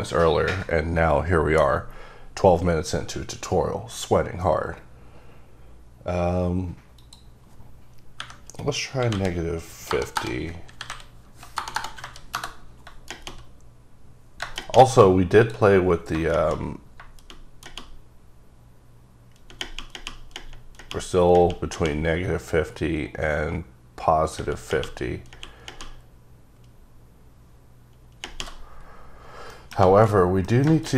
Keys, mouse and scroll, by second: 7.1 click, 8.3 KP_Subtract, 9.1-12.2 typing, 12.5 KP_Enter, 15.5 click, 29.6 scroll up 1, 29.6 middle click, 29.9 alt+z, 30.3 scroll down 2, 30.5 scroll up 1, 30.6 middle click.